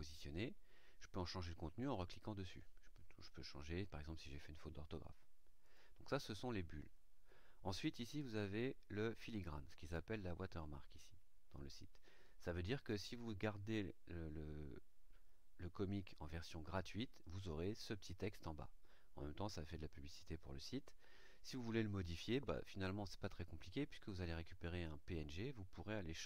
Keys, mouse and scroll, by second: 0.2 click, 1.8 click, 5.6 click.